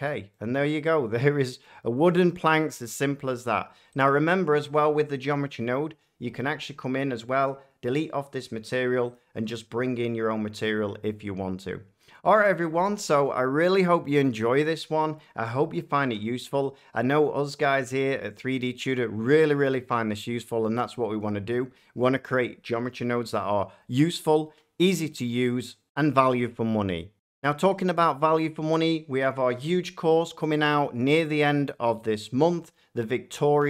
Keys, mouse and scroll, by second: 0.9 middle click, 1.7 middle click, 2.2 scroll, 2.2 middle click, 3.9 click, 4.0 shift+scroll, 9.1 click.